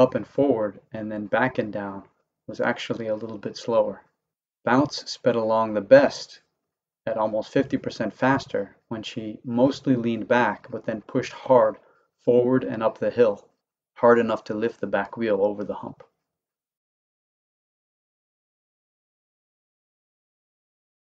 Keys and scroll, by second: 13.4 Left, 13.9 Up, 13.9 Right, 14.2 Left, 15.0 Up, 15.0 Right, 15.4 Left, 16.1 Up, 16.1 Right, 16.5 Left, 17.3 Up, 17.3 Right, 17.7 Left, 18.5 Up, 18.5 Right, 18.9 Left, 19.6 Up, 19.6 Right, 20.0 Left, 20.7 Up, 20.7 Right, 21.1 Left.